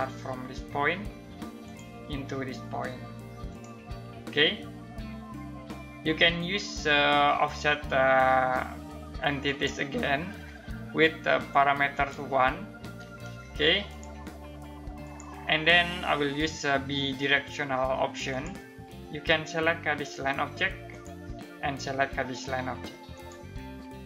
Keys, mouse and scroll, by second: 4.7 Escape, 9.0 click, 17.9 click, 20.5 click.